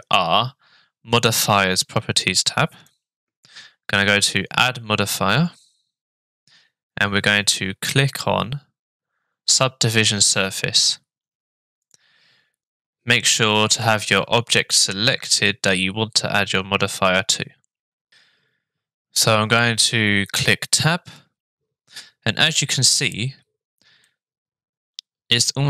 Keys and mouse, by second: 2.9-12.0 drag, 20.8 Tab, 24.1-25.6 middle drag.